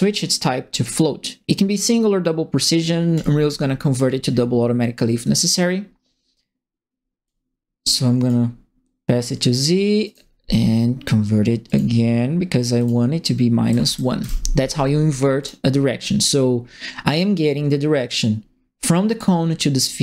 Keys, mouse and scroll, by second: 3.1 click, 4.2 middle click, 7.2-8.2 drag, 10.0 right click, 11.6 click, 12.7 click, 13.6 KP_Subtract, 14.2 KP_Enter, 15.4 click, 15.9 scroll up 2.